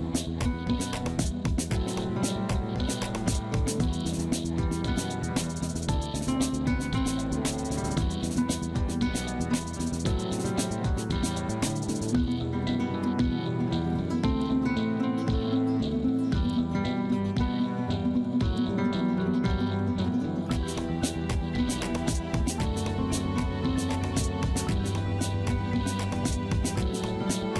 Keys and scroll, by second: 3.8 F3, 4.0 F2, 21.5 F3, 22.0 F2, 24.8 space, 25.2 F2.